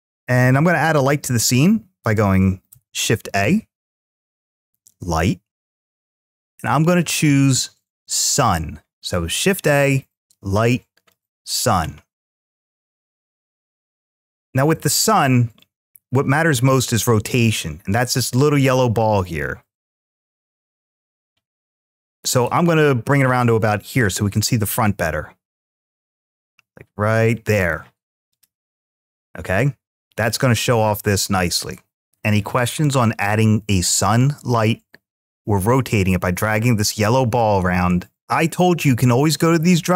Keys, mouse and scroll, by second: 0.0 click, 2.5 shift+a, 13.6-16.6 middle drag, 16.6 click, 28.2 click, 28.7-30.7 middle drag, 30.7-31.0 scroll down 1, 31.0 scroll up 1, 31.9 scroll down 1.